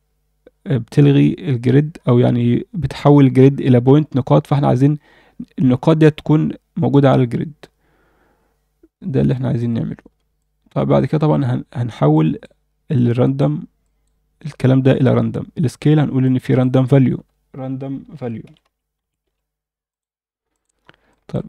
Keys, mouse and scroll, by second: 8.9 scroll down 1, 9.3-9.6 alt+middle drag, 9.8 scroll down 1, 10.4 alt+shift+middle click, 12.1 click, 13.0 click, 13.8 click, 16.2-20.6 drag, 20.8 scroll up 1, 21.1 alt+shift+middle click.